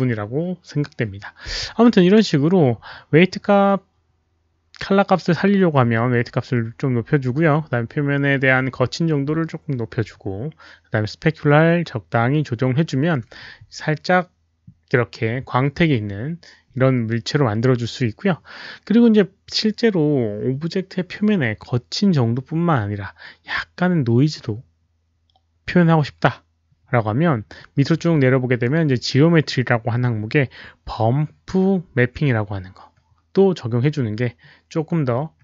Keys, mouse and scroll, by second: 6.0 Return, 6.0 KP_5, 27.7 middle click.